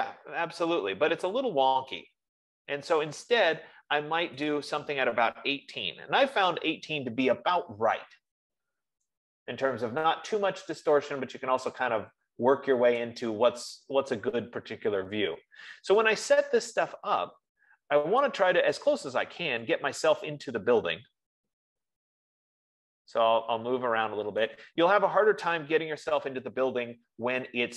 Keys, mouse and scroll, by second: 3.4 right click, 4.8 click, 5.6-9.3 typing, 13.6 right click, 16.4 middle click, 19.3 middle click, 19.3 right click, 19.6 middle click, 24.3 middle click, 25.0-27.7 right drag.